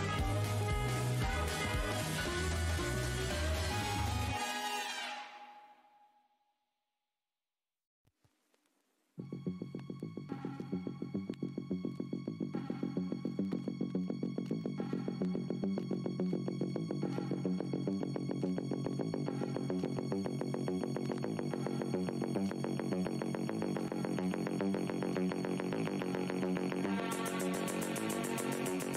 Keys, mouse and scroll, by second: 1.9 click, 3.0 shift+right click, 4.3 click, 5.0 w, 5.5 alt+scroll up 1, 7.4 click, 9.1 click, 9.6 ctrl+right click, 11.2 alt+click, 11.4 alt+scroll up 1, 12.1 click, 12.4 w, 13.0 shift+click, 14.8 e, 16.3 `, 16.6 v, 17.7 click, 18.2 z, 18.8 click, 20.9 scroll down 1, 21.2 w, 22.3 click, 23.5 shift+click, 24.0 alt+scroll up 1, 27.0-27.4 alt+scroll, 27.4 2, 27.6 Tab.